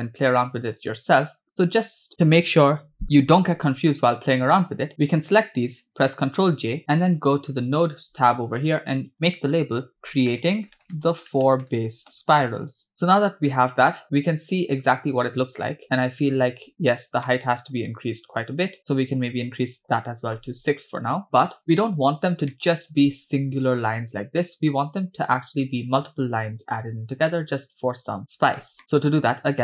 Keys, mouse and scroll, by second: 1.4-2.1 drag, 6.2 ctrl+j, 7.9 click, 9.1-12.9 drag, 13.7 click, 14.0-15.1 middle drag, 15.8 middle click, 17.0 scroll up 2, 17.2 middle click, 17.7-18.1 scroll up 1, 18.6-19.8 shift+drag, 20.8-21.1 scroll down 2, 21.6-22.4 scroll up 4, 22.5-22.9 shift+middle drag, 27.3 middle click, 28.5 scroll down 2, 28.8 middle click, 29.4 click.